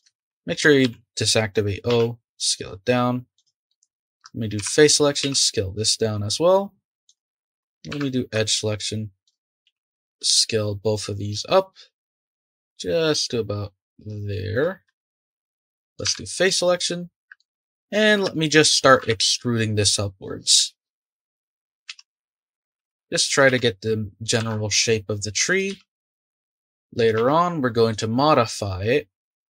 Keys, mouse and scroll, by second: 0.2 ctrl+z, 0.8 o, 1.9 s, 3.7 click, 4.6 3, 4.7 click, 5.2 s, 7.2 shift+middle click, 7.9 2, 9.2 shift+click, 9.6 s, 15.0-16.0 shift+middle drag, 16.0 3, 16.4 click, 16.8-19.0 middle drag, 19.0 e, 21.0 middle click, 21.9 s, 22.8 e, 23.5 s, 24.4 e, 25.7 s, 26.3 e, 27.1 s, 28.2-29.4 middle drag.